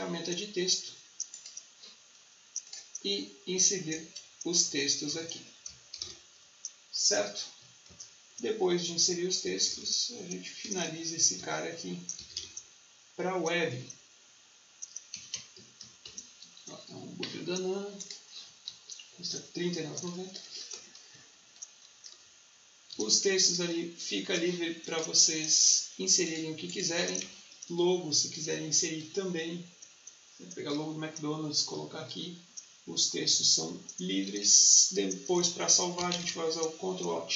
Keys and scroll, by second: 3.8 Caps_Lock, 5.6-6.4 typing, 7.7 ctrl+a, 8.2 Caps_Lock, 9.3-10.7 typing, 11.3 Caps_Lock, 12.2 shift+r, 13.3 shift+4, 13.6 space, 14.8-16.5 typing, 18.6 ctrl+t, 20.6 Return, 21.0 v, 22.1 t, 34.3 ctrl+s, 36.0 ctrl+alt+shift+s.